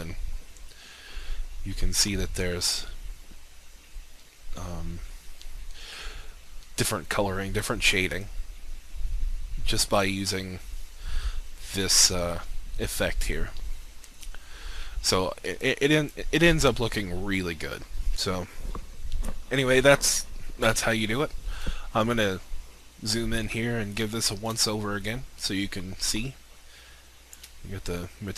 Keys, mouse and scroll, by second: 10.2-12.5 scroll down 1, 15.5 click, 22.4-24.3 scroll up 1, 24.5 alt+shift+click.